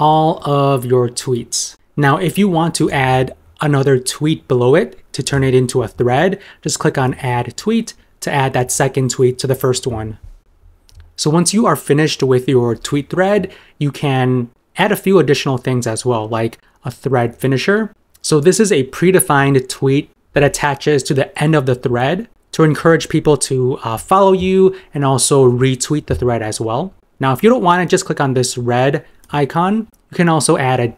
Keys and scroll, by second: 0.5 super+m, 21.8 super+m.